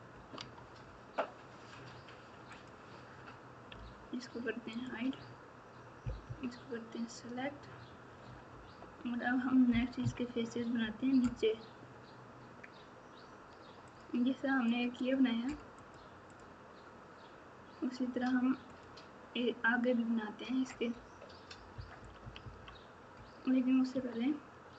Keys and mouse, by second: 0.3 Tab, 3.7 h, 8.5 KP_8, 9.6 KP_1, 10.0 KP_3, 13.8 click, 15.7 click, 18.7 click, 21.7 KP_6, 21.9 KP_6, 23.9 Tab.